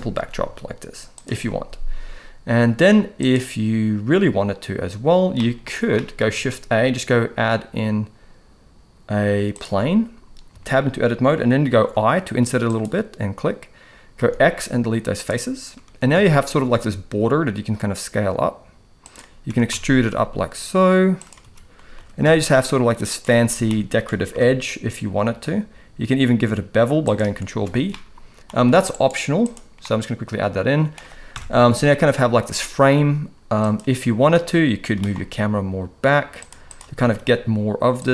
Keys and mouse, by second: 0.4 s, 5.4 middle drag, 5.9 middle drag, 6.3 shift+a, 10.5 Tab, 11.9 i, 14.2 x, 16.2 a, 16.5 s, 19.5 e, 21.4 a, 22.0 g, 23.7 shift+middle click, 24.4 ctrl+b, 27.6 Tab, 27.9-28.4 middle drag, 28.9-29.8 right drag, 29.8-30.9 middle drag, 31.3 KP_0, 34.9 g, 37.0 s.